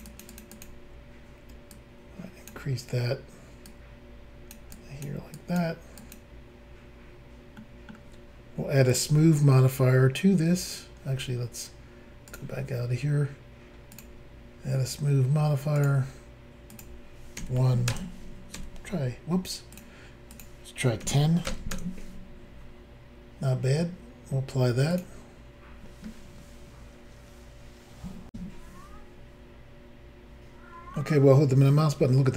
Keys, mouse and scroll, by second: 0.0 ctrl+click, 0.1 ctrl+click, 0.2 ctrl+double click, 0.3 ctrl+click, 0.4 ctrl+click, 0.5 ctrl+click, 0.6 ctrl+double click, 1.7 click, 3.7 click, 4.7 click, 5.4 click, 6.0 click, 6.1 click, 7.6 middle click, 8.9 click, 9.0 click, 12.3 click, 13.9 click, 15.8 click, 16.7 click, 17.4 1, 17.9 Return, 18.6 1, 19.7 click, 20.3 click, 21.0-21.5 typing, 21.7 Return, 24.9 click, 25.0 click, 28.3 Insert, 30.9 middle click, 32.0 scroll down 1.